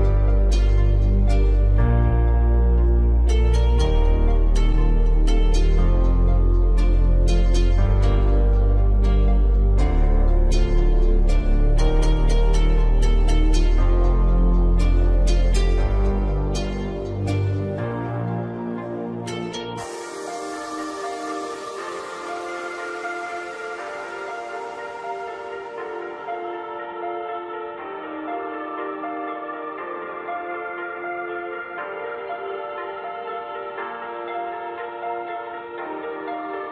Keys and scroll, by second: 23.2 ctrl+alt+shift+e.